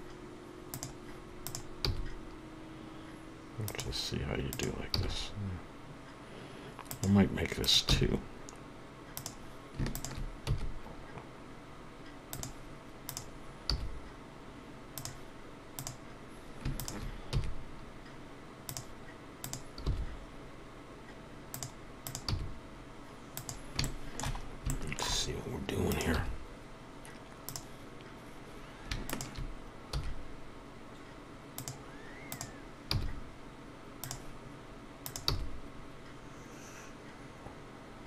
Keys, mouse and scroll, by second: 0.7 e, 1.4 click, 3.7 g, 4.5 click, 6.9 g, 9.9 shift+click, 12.3 e, 13.1 click, 15.0 g, 18.6 e, 19.3 shift+click, 23.8 click, 24.4 scroll up 1, 24.7 shift+middle click, 25.1 scroll up 3, 25.9 click, 27.5 g, 29.1 shift+click, 29.9 shift+click, 31.6 e, 32.3 click, 32.9 click, 34.0 g, 35.0 click, 35.3 click.